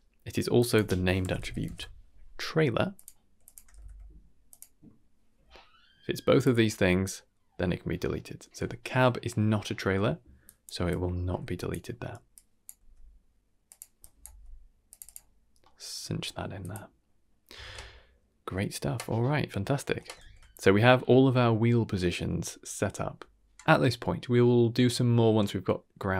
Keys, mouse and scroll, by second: 0.5-3.0 drag, 3.4-4.5 drag, 6.4-7.0 drag, 10.4 drag, 10.9-11.7 drag, 12.3-12.7 drag, 12.7 g, 14.0 click, 14.3 g, 15.0 click, 15.4 scroll down 1, 15.6-15.9 middle drag, 16.0 scroll down 2, 16.2 middle click, 16.6 click, 17.6 ctrl+s, 18.9-19.9 middle drag, 20.2 ctrl+s.